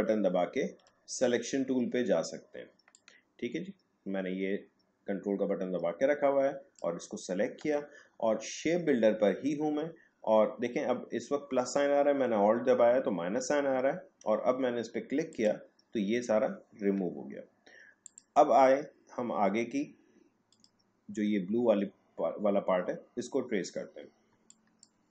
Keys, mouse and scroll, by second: 2.9-9.9 ctrl+drag, 12.3 ctrl+click, 15.3 alt+click, 20.5 click, 23.3 click, 23.5-24.0 alt+scroll up 1, 24.3 space, 24.5 click, 24.8 space.